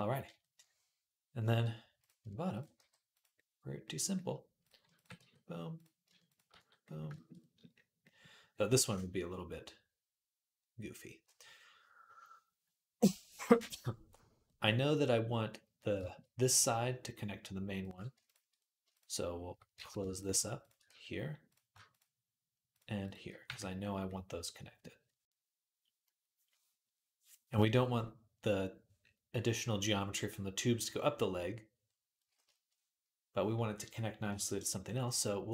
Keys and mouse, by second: 2.6 g, 3.8 middle click, 4.7 ctrl+click, 4.8-22.8 ctrl+middle drag, 5.0 f, 6.0 shift+a, 6.3 f, 19.6 ctrl+z, 20.7 f, 22.8 shift+click, 22.9-35.5 middle drag, 23.3 f.